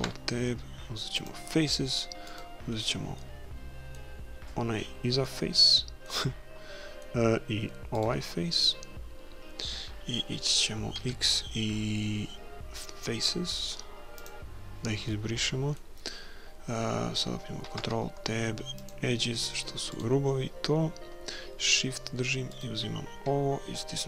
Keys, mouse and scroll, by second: 0.0 ctrl+Tab, 2.3-4.2 right drag, 3.2 middle click, 4.2-5.2 middle drag, 5.3-7.1 middle drag, 8.0 right click, 8.3 middle click, 8.5-9.7 right drag, 9.7 middle click, 11.0 x, 15.1-16.8 middle drag, 17.7 ctrl+Tab, 19.9-21.8 right drag, 22.5-24.0 right drag.